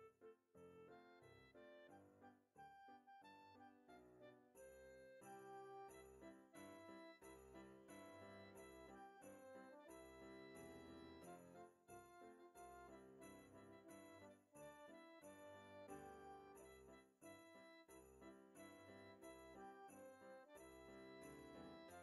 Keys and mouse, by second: 0.1 click, 2.0 middle click, 3.5 ctrl+z, 5.2 KP_2, 7.0 click, 10.8 middle click, 11.4 click, 14.1 middle click, 14.5 click, 16.2 middle click, 17.7 KP_1, 18.9 click, 21.2 click.